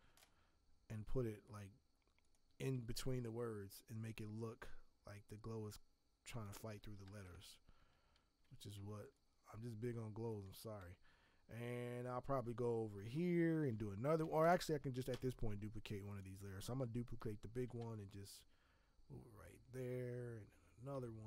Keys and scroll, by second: 3.1 ctrl+t, 8.7 v, 12.9 b, 15.1 v.